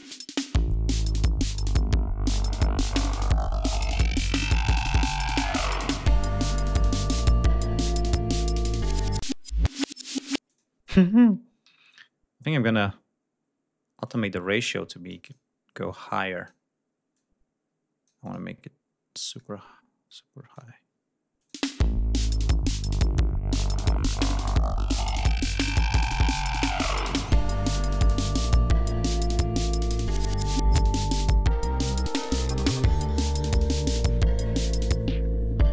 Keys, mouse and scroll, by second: 8.9 space, 9.2 scroll down 1, 10.1 click, 10.8 ctrl+scroll up 2, 11.3 ctrl+d, 13.7 click, 14.3 click, 15.7 click, 16.8-18.2 drag, 19.2-20.5 drag, 21.2 click, 21.4 space, 28.0 ctrl+scroll down 2, 31.1 ctrl+scroll down 2, 31.5 ctrl+scroll up 2, 31.8 ctrl+g, 32.1-32.4 scroll up 2, 32.6-32.9 scroll down 2, 33.1 scroll down 2.